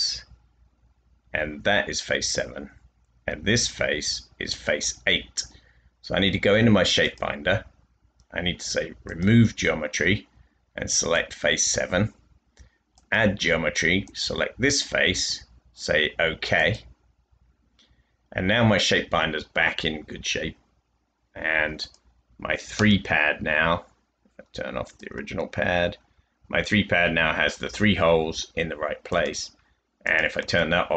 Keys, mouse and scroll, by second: 14.0 click, 25.9-26.5 scroll down 2, 30.3 space.